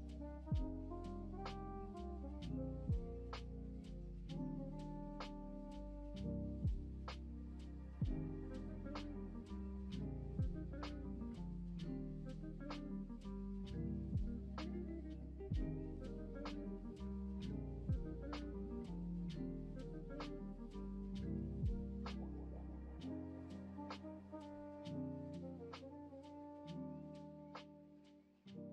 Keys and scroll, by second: 0.1 ctrl+v, 4.2 space, 5.0 s, 6.8 r, 17.5 ctrl+space, 18.4-19.7 typing.